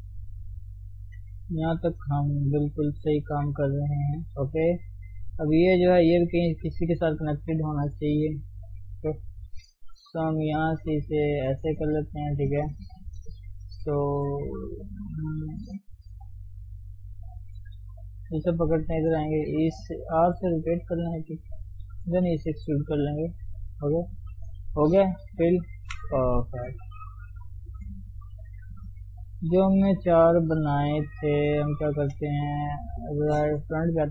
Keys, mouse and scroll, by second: 0.1 KP_3, 0.6-1.0 scroll up 1, 1.0 shift+z, 1.3-3.0 middle drag, 3.0 shift+z, 3.1-4.3 shift+middle drag, 4.3 KP_3, 4.6 middle click, 5.0 scroll up 1, 5.3-6.8 shift+middle drag, 6.8 click, 7.9 KP_3, 8.4 KP_1, 9.0 KP_3, 9.3-10.1 scroll up 1, 10.2 g, 11.7 scroll down 1, 12.0-14.2 shift+middle drag, 14.2 scroll up 1, 17.0 click, 17.8-18.2 scroll down 1, 18.2 shift+z, 19.0 ctrl+click, 19.1 scroll up 1, 20.0 r, 21.7 e, 24.3 click, 25.4 f, 25.5 scroll down 3, 25.8 shift+z, 25.9-27.1 middle drag, 27.1-27.7 scroll up 1, 27.7 click, 28.7 middle click, 29.1 scroll down 1, 29.4 KP_1, 29.7 KP_3, 30.5 shift+z, 31.8 ctrl+click, 32.0 shift+z, 33.2 KP_1, 33.8-34.1 scroll up 1.